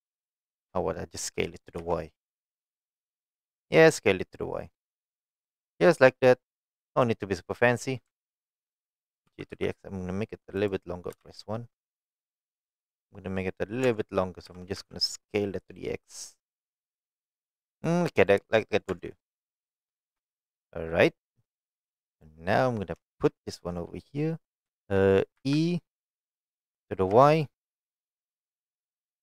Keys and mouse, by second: 0.3 shift+click, 0.7 middle click, 1.4 s, 1.8 y, 5.3 click, 5.6-6.9 middle drag, 8.2 alt+click, 9.3 g, 9.5 x, 10.6 right click, 11.1 KP_1, 13.9 Tab, 14.5 s, 14.8 x, 17.7 click, 18.3-18.8 middle drag, 18.9 Tab, 19.1 middle click, 20.0 shift+middle click, 20.4 middle click, 23.1 shift+middle click, 24.7 shift+middle click, 25.4 e, 27.1 y.